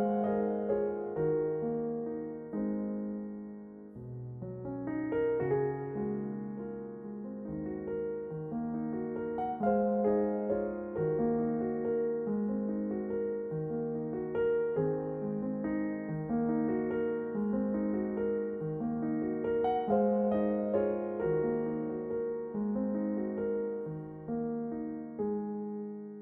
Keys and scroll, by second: 2.2 a, 2.9 u, 5.3 s, 6.9 g, 9.3 s, 12.0 shift+a, 15.1 s, 18.3 s, 20.7 s, 23.9 s.